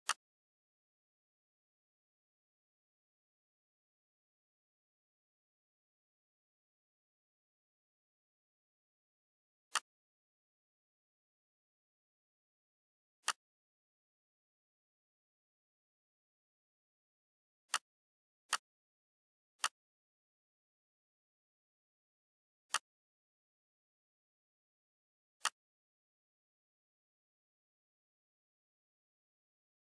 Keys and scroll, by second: 2.0 6, 2.8 0, 3.2 Return, 5.0 F4, 6.5 ctrl+c, 7.5 ctrl+v, 10.8 1, 11.7 Return, 14.4 1, 15.1 2, 15.9 Return, 27.1 7, 27.7 5, 28.4 Return.